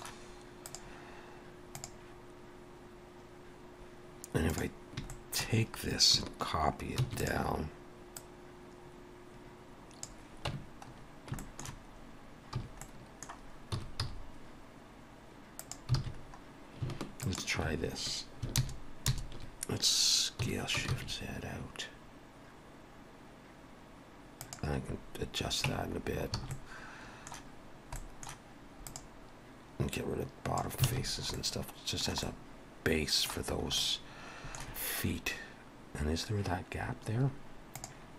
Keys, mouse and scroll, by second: 0.6 click, 5.1 shift+middle click, 7.0 shift+d, 8.2 click, 10.5 Tab, 10.8-11.3 scroll up 2, 11.4 shift+middle click, 11.9 scroll up 1, 12.6 a, 12.8 middle click, 13.7 s, 16.1 alt+a, 16.2 scroll up 1, 16.8 scroll up 1, 17.2 alt+shift+click, 18.5 ctrl+KP_Add, 19.3 ctrl+KP_Add, 20.4 s, 25.7 Tab, 26.0-26.4 scroll down 3, 26.4 alt+a, 26.5 middle click, 28.0 middle click, 28.9 click, 29.9 click, 30.9 alt+a, 31.0-31.6 scroll down 2, 31.4 middle click, 32.2 middle click, 33.5-33.9 scroll up 2, 33.7 middle click.